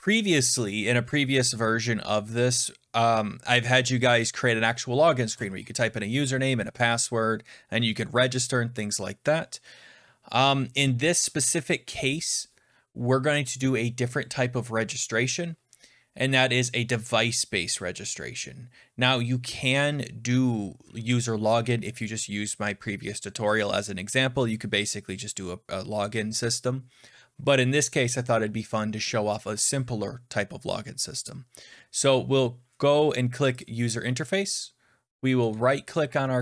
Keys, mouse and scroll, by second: 33.6 click, 35.4 middle click.